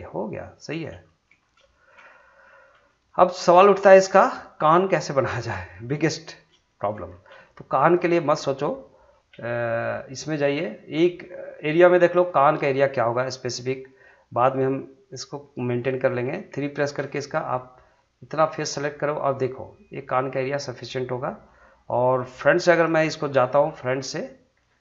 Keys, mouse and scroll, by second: 1.4 scroll up 1, 1.7 shift+middle click, 2.1 middle click, 3.4-5.3 middle drag, 5.3 scroll down 1, 5.7 shift+middle click, 6.1 middle click, 6.7 shift+middle click, 7.1 scroll up 1, 7.4 shift+middle click, 10.5-10.9 scroll up 2, 11.5-14.8 shift+middle drag, 16.5 3, 17.3 click, 18.4 shift+click, 19.0-21.4 middle drag, 22.4 middle click.